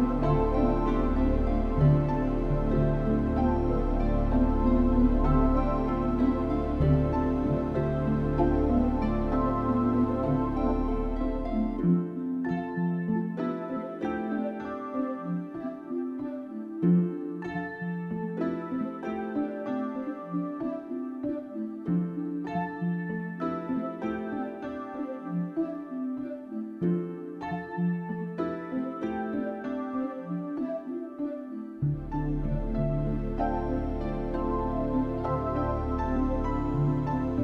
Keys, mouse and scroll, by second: 1.3 click, 3.2 click, 4.0 click, 5.3 click, 5.8 click, 6.5 click, 8.0 middle click, 8.9 middle click, 9.7 middle click, 10.2 KP_1, 11.0 u, 15.8 click.